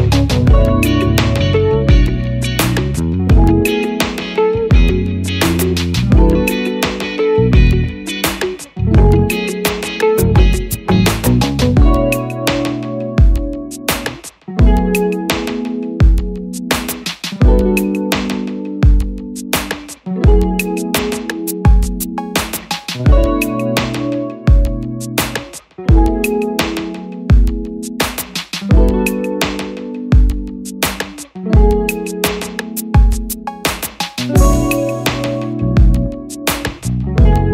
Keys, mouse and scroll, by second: 14.4 double click, 19.6 Return, 25.6 double click, 31.3 Return, 36.3 double click.